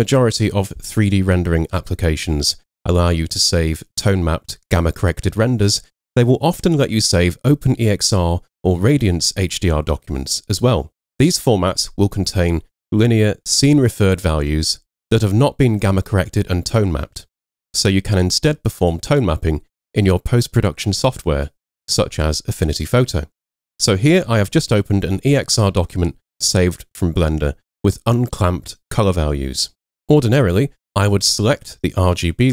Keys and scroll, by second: 24.3 super+0.